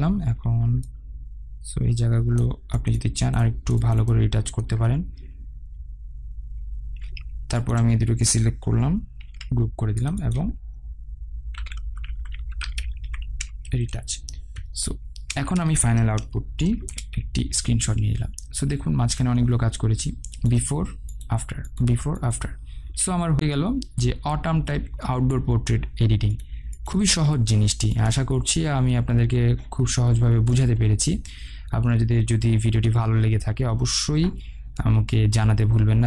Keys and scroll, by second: 10.0 ctrl+g, 14.6 Return, 17.5 ctrl+alt+shift+e.